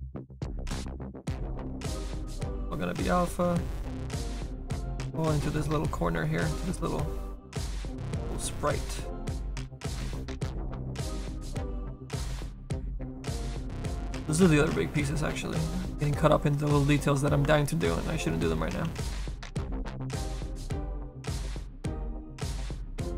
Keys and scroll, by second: 18.9 s.